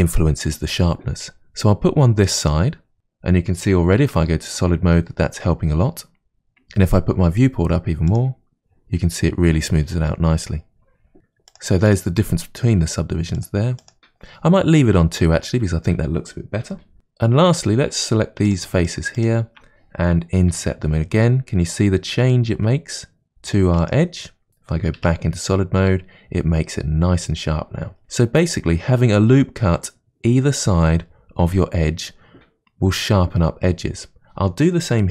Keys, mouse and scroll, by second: 2.5 click, 2.9-4.0 middle drag, 4.0 Tab, 8.1 click, 11.5 click, 13.4-14.4 drag, 16.9 Tab, 17.5 3, 18.0 click, 18.5 shift+click, 18.9 shift+click, 19.2 shift+click, 25.0 Tab, 28.4-31.6 scroll up 2.